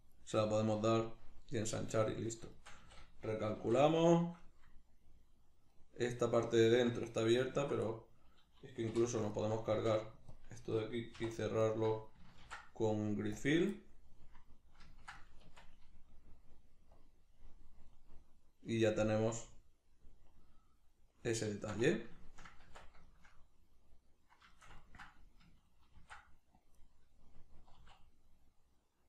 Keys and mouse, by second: 1.4-7.4 middle drag, 2.8 a, 3.6 shift+n, 7.4 alt+right click, 7.9-9.3 middle drag, 8.9 3, 9.3 alt+right click, 9.8 x, 11.6 alt+right click, 12.4 ctrl+f, 13.7-16.9 middle drag, 15.4 Tab, 16.9 click, 17.9-26.9 middle drag, 22.7 Tab, 26.0 ctrl+r, 26.9 right click, 27.7 alt+s.